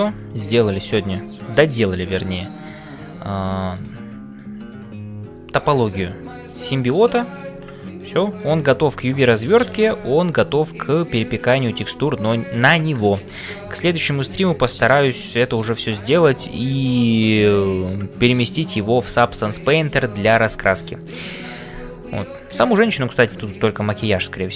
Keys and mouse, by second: 0.0 ctrl+space, 1.0 middle click, 2.2 middle click, 3.5 click, 4.3-6.9 middle drag, 4.8 c, 7.2 shift+middle click, 8.0 middle click, 10.0 shift+middle click, 10.8 middle click, 12.0-13.1 middle drag, 14.0-16.2 middle drag.